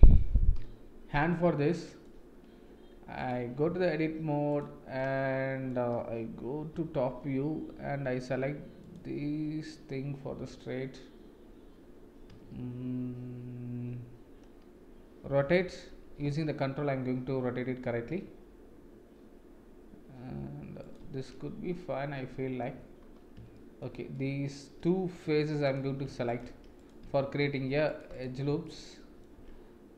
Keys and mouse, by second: 0.6 KP_1, 1.7 shift+middle drag, 3.2 click, 3.6 Tab, 4.5 click, 5.0-5.7 middle drag, 6.7 KP_7, 12.3 a, 16.2 ctrl+r, 21.3-22.6 middle drag, 23.5 shift+middle click, 24.1 middle click, 25.2 3, 27.4 ctrl+r, 28.7 shift+middle click.